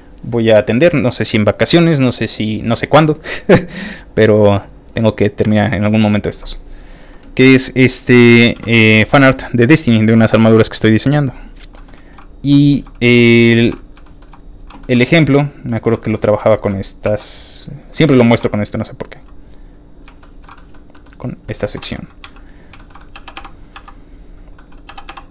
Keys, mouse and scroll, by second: 8.5 z, 8.9 shift+middle click, 9.9 click, 10.8 click, 11.4 click, 11.7 shift+middle click, 12.0 shift+middle click, 12.0 shift+scroll up 1, 12.5 shift+middle click, 13.3 shift+middle click, 14.0 shift+middle click, 14.8 shift+middle click, 15.4 shift+click, 16.0 shift+middle click, 16.2 shift+middle click, 16.4 scroll up 2, 16.5 shift+Tab, 17.4 click, 17.4 3, 17.6 scroll down 3, 17.9 middle click, 18.3 shift+d, 19.2 z, 19.9 click, 20.2 shift+middle click, 20.5 shift+middle click, 20.9 shift+middle click, 21.1 shift+middle click, 21.2 middle click, 21.2 shift+scroll down 1, 21.4 middle click, 21.8 shift+g, 22.2 z, 22.5 click, 22.7 shift+middle click, 23.0 shift+middle click, 23.2 shift+g, 24.3-25.3 typing, 24.5 middle click.